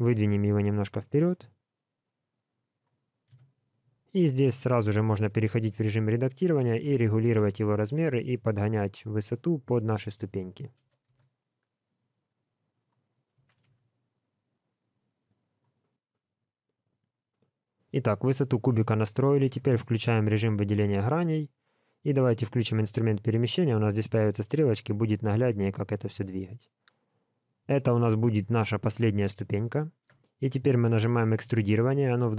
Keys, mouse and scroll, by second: 3.2 KP_1, 3.9-4.3 scroll up 3, 4.3 shift+middle click, 4.9 Tab, 5.5 s, 6.9 g, 9.3 middle click, 10.8 g, 13.3 s, 16.8 scroll up 4, 17.3 middle click, 19.5 3, 20.1 click, 22.4 click, 23.7 click, 29.7 shift+middle click, 31.4 e.